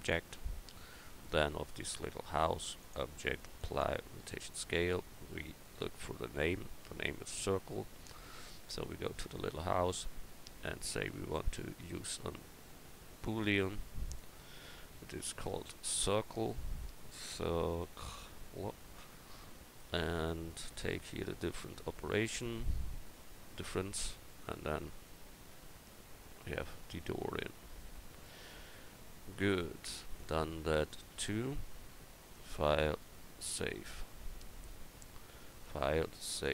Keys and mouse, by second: 1.0-2.8 right drag, 5.4-7.3 right drag, 8.9-11.7 right drag, 11.7-14.2 drag, 15.3-17.1 drag, 23.4-24.4 drag, 24.4-25.9 middle drag, 26.8-27.8 drag, 31.1 a.